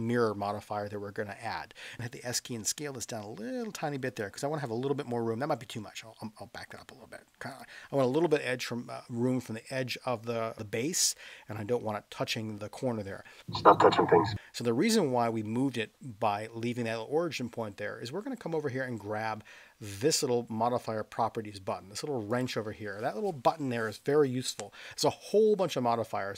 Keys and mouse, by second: 2.0 s, 4.1 click, 5.7 s, 7.5 click.